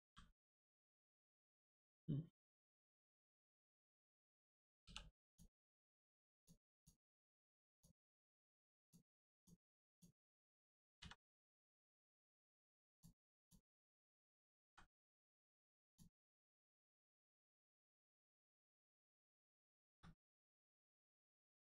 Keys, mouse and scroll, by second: 3.4 right click, 4.8 3, 5.3 click, 7.7 click, 9.8 click, 10.9 x, 11.5 click, 14.6 x, 15.2 click, 17.5 scroll down 1, 18.0 shift+middle click, 18.3 middle click, 18.4 middle click, 19.3 shift+middle click, 20.1 scroll down 1, 20.8 middle click.